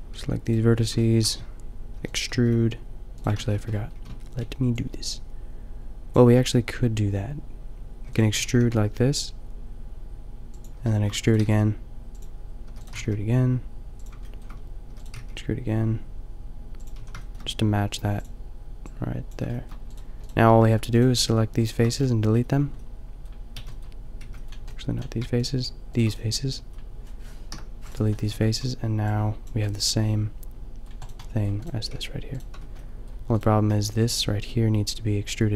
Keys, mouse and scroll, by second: 0.2 g, 2.0 e, 2.3 g, 3.4 ctrl+z, 4.0 a, 4.4 b, 8.0 e, 8.3 g, 10.9 middle click, 11.2 e, 11.4 g, 12.6 e, 12.8 g, 14.8 e, 15.2 g, 17.0 a, 20.2 middle click, 22.7 middle click, 23.6 b, 24.2 b, 26.2-27.7 drag, 27.5 Delete, 28.4 Tab, 30.2-31.5 middle drag, 31.9 g, 32.6 Tab, 34.7 middle click, 35.1 middle click.